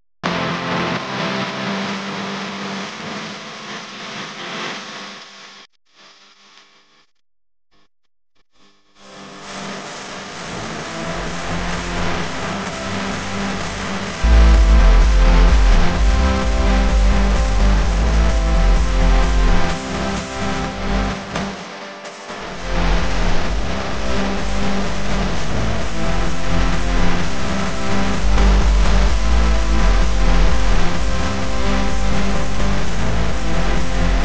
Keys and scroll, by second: 3.0 space, 3.6 space, 4.5 alt+super+space, 4.5 alt+super+space, 4.6 alt+super+space, 4.8-6.0 typing, 7.7 i, 8.6 v, 9.5 Tab, 10.3 a, 14.7 v, 16.4 a, 26.5 v, 31.2 Tab, 31.7 space, 32.2 space.